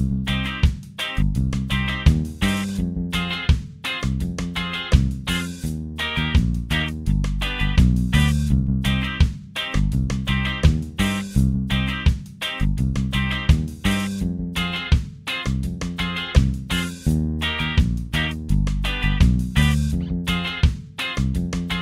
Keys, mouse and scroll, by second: 3.2 ctrl+click, 6.0 ctrl+click, 7.5 ctrl+d, 10.0 click, 12.1-14.0 drag, 15.9 ctrl+d, 17.8-20.7 drag.